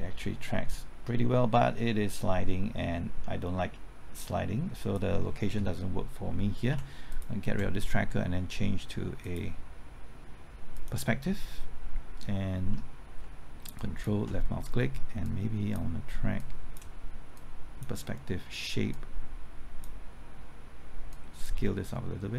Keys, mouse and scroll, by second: 6.7 x, 7.1 click, 13.8 ctrl+click, 15.3-22.3 drag.